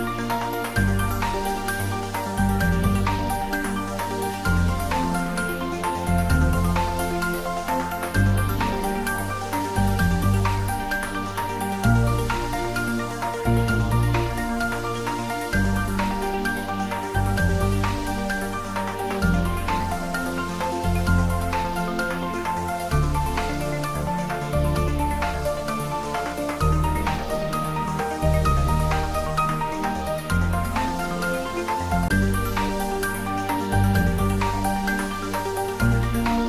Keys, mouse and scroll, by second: 0.2-0.7 scroll down 1, 0.7 middle click, 0.9 middle click, 1.6 ctrl+z, 4.5 ctrl+b, 5.9 click, 10.1 ctrl+z, 11.2 ctrl+z, 12.2 ctrl+b, 13.6 click, 16.0-29.6 drag, 29.6-32.4 drag, 36.2-36.4 scroll up 1.